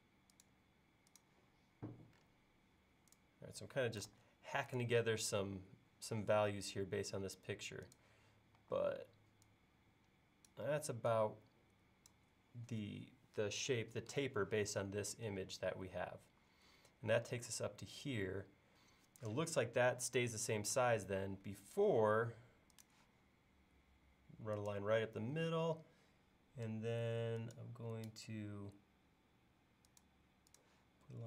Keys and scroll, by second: 4.1 super+z, 8.6 e, 21.2 l.